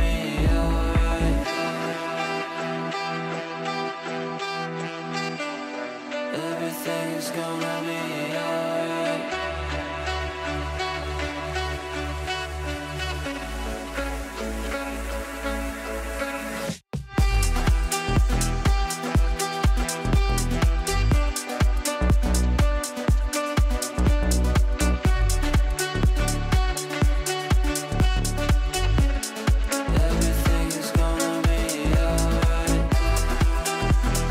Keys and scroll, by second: 1.1 Delete, 2.4 ctrl+z, 3.9 Delete, 7.5 Delete, 11.0 Delete, 30.1 shift+F2, 30.6 F3, 31.1 g, 33.8 ctrl+z.